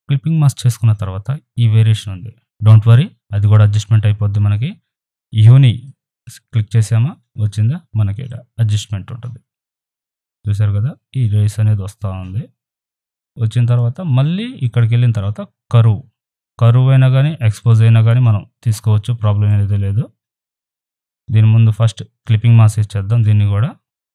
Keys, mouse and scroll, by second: 5.0-13.6 drag, 17.6-21.7 drag, 23.1 right click.